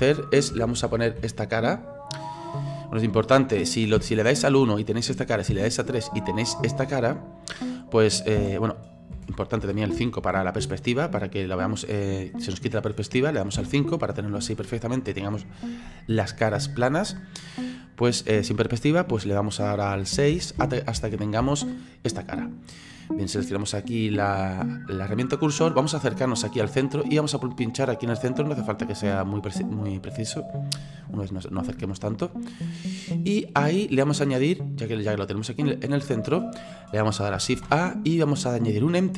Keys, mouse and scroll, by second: 0.0-0.8 KP_6, 0.9 KP_6, 1.2 KP_6, 4.0 KP_1, 5.5 KP_3, 8.4-10.6 typing, 13.5 KP_5, 20.0-21.4 typing, 24.6-25.7 drag, 25.7-26.2 scroll up 11, 28.7 click, 32.2-32.7 scroll down 10, 33.7-37.6 middle drag, 37.6 shift+a.